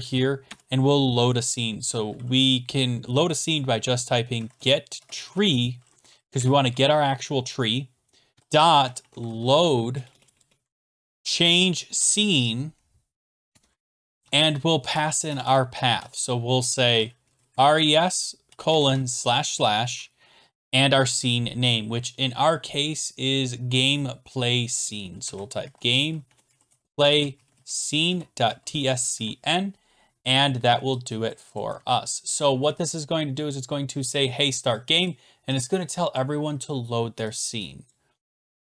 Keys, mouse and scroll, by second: 0.5 Return, 4.1-6.2 typing, 6.4 Return, 8.1-11.6 typing, 10.8 click, 13.5 Tab, 14.2-15.4 typing, 16.6-19.3 typing, 22.1 click, 22.1 click, 25.0-31.3 typing, 31.3 click, 31.6 click, 31.8 ctrl+s, 34.7 click, 35.1 click, 36.2 click, 37.9 click.